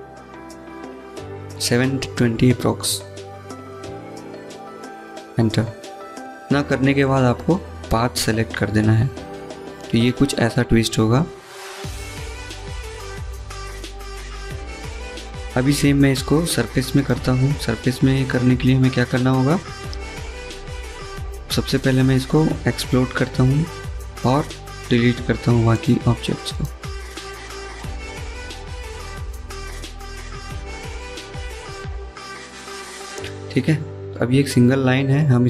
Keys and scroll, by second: 0.9 3, 1.8 BackSpace, 2.5 2, 3.0 0, 17.4 Escape, 17.6 Escape, 20.0 x, 29.4 Delete, 31.8 Delete, 35.1-35.4 typing.